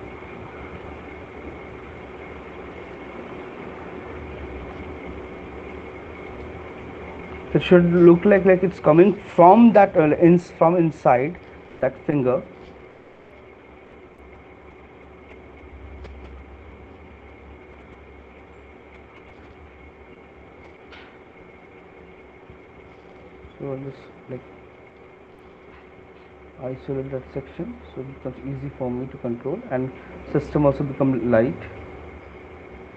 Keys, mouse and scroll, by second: 3.1 shift+click, 7.1 right click, 13.8 right click, 16.8 right click, 20.4 click, 22.2 alt+click, 24.4 click, 26.3 click, 28.6 shift+click, 28.8 right click, 29.6 alt+click, 31.5 right click, 31.6 alt+click, 32.4 click.